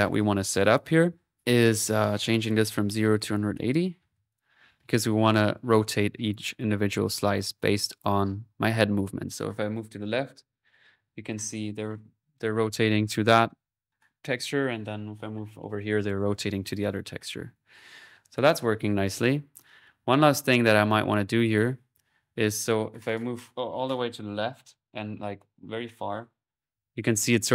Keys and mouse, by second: 0.0-1.3 drag, 1.3 p, 1.6 click, 3.1 click, 4.9 click, 6.2 click, 6.6 click, 8.0 click, 20.1 typing, 20.5-22.0 drag.